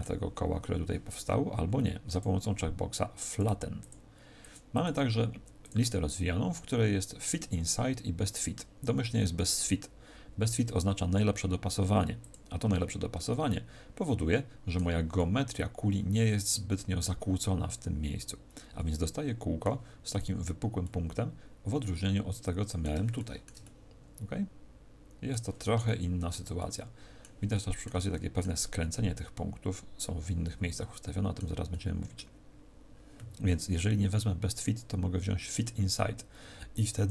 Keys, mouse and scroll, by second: 2.0 click, 3.2 click, 13.2 middle click, 15.1 middle click, 17.4 middle click, 20.8 middle click, 23.1 shift+middle click, 23.6 middle click, 25.8 shift+middle click, 26.5 middle click, 27.4 middle click, 28.1 middle click, 30.4 middle click, 31.6 middle click, 34.4 click.